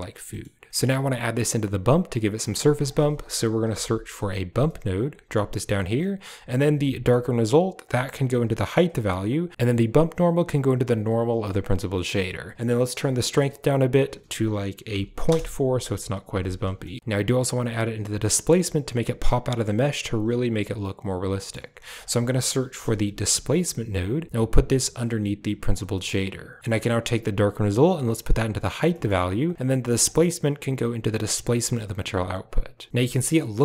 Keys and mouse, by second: 0.2 click, 0.6 click, 2.3 click, 2.7 shift+a, 7.8-8.7 drag, 9.2 drag, 10.1-11.0 drag, 11.8 middle click, 13.8-15.2 drag, 16.9 shift+click, 21.2 click, 21.7 shift+a, 25.8 middle click, 27.5-28.5 drag, 28.7 middle click, 29.3 click, 29.9-31.6 drag.